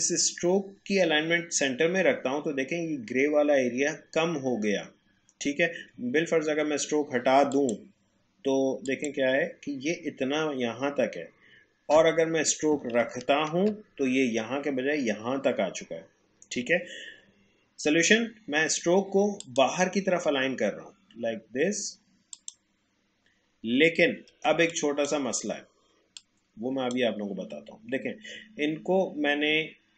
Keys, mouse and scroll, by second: 7.5 click, 12.7 click, 13.0 ctrl+z, 16.6 ctrl+alt+z, 17.0 alt+scroll down 1, 17.7-18.0 alt+scroll up 1, 19.4 click, 22.3 click, 23.9-24.3 alt+scroll down 1, 24.5 space, 24.7 click, 25.0 space, 26.1-29.4 drag.